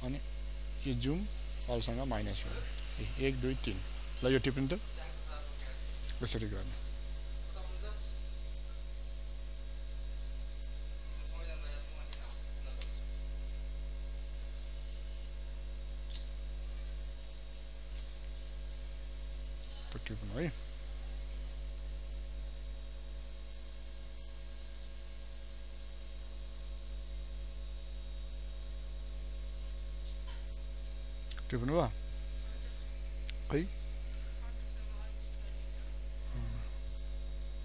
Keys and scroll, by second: 0.9 ctrl+space, 1.6 ctrl+alt+space, 4.2 ctrl+space.